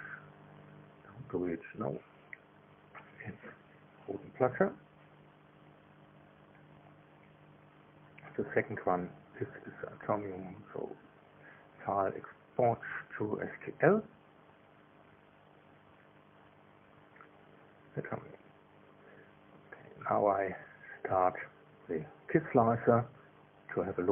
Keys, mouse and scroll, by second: 2.7 click, 3.6-6.1 typing, 6.9 Return, 8.8 click, 11.1 click, 12.4 click, 14.9 click, 15.7 s, 15.9 s, 16.8 click, 17.7 click, 19.2 click, 24.0 click.